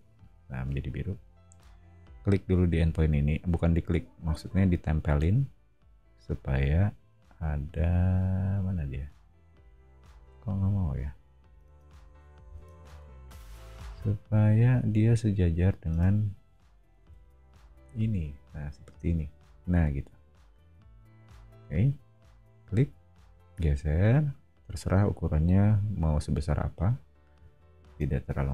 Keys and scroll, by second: 11.6 space, 12.4 o, 15.1 Escape, 15.9 space, 17.0 c, 20.9 Up, 22.7 scroll up 1, 28.0 space.